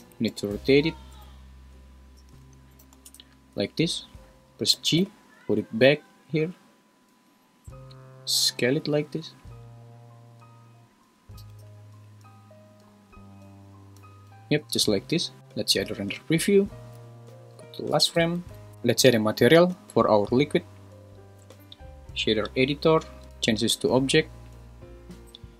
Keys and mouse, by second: 0.0 r, 0.3 9, 0.4 0, 1.1 Return, 2.2 r, 2.4 1, 2.7 8, 2.8 0, 3.1 Return, 4.7 g, 5.0 y, 7.1 `, 7.9 s, 11.4 g, 11.6 y, 12.9 s, 15.1 `, 16.0 click, 17.3 shift+Right, 18.5 super+s, 20.4-21.8 drag, 23.6-24.6 drag.